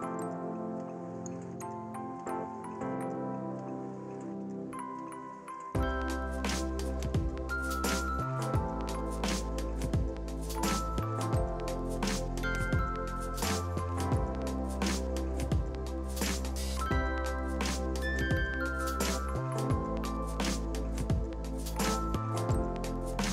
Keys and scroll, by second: 6.9-7.8 typing, 21.1-23.3 typing.